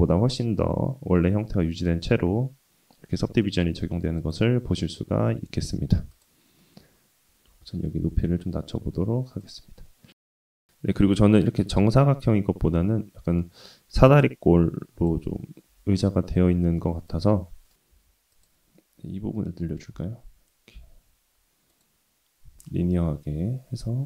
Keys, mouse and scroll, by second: 0.1-1.2 middle drag, 1.5 scroll up 1, 1.9 scroll down 2, 2.2-3.1 middle drag, 4.2-5.0 right drag, 6.1 click, 6.6 middle click, 7.2 Tab, 7.2 click, 7.5 middle click, 8.2 middle click, 8.8 KP_3, 9.7 s, 11.6-12.2 middle drag, 12.7 scroll down 1, 12.7 middle click, 13.2-14.7 middle drag, 14.9 Tab, 15.3 Tab, 15.7 click, 16.2 middle click, 17.1 g, 20.3-22.2 drag, 22.5 g.